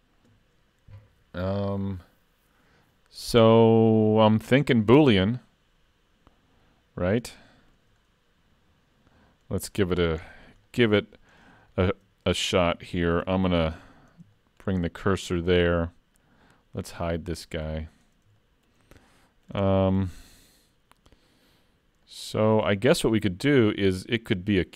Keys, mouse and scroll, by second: 7.0-7.6 scroll up 3, 7.6 shift+middle click, 8.0 middle click, 9.8 middle click, 10.3 scroll down 4, 10.7 shift+middle click, 11.3-11.7 scroll down 2, 11.7 shift+middle click, 13.3 shift+s, 14.4 shift+middle click, 14.9 middle click, 16.2 click, 17.9 click, 18.4 shift+middle click, 19.2 middle click, 19.7 shift+middle click, 20.5 scroll up 1, 22.0 middle click, 22.8 shift+middle click.